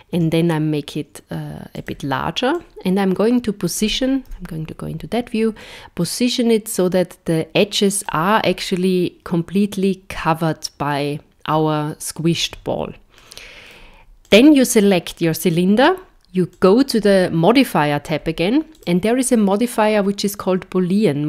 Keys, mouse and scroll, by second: 0.1 s, 2.5 click, 4.2 KP_1, 5.6 click, 8.6 middle click, 14.3 click, 15.2-16.5 scroll down 1, 16.5 click, 18.7 click.